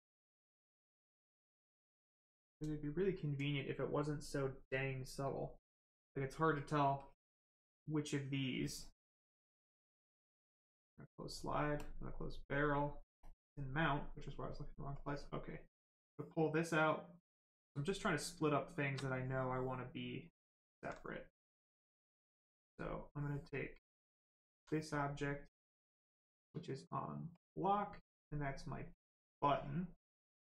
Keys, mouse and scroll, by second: 6.9 click, 13.6 click, 14.9 click, 17.9 right click, 19.6 alt+right click, 27.6 click.